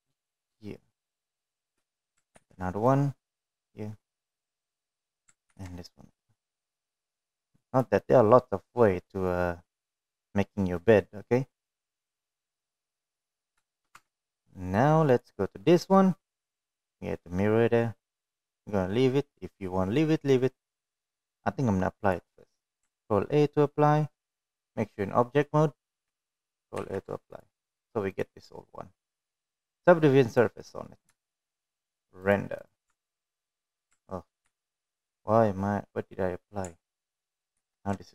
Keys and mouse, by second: 0.8 ctrl+r, 4.0 shift+middle click, 4.5 ctrl+r, 7.6 ctrl+r, 10.9-12.2 middle drag, 14.4 middle click, 15.9 shift+middle click, 16.3 Tab, 16.3 middle click, 24.2 click, 28.3 ctrl+a, 29.0 ctrl+a, 30.0 click, 30.4-32.6 drag, 33.1 middle click, 33.6 shift+middle drag, 34.5 click, 34.9 click, 35.2 Tab, 36.7 ctrl+r.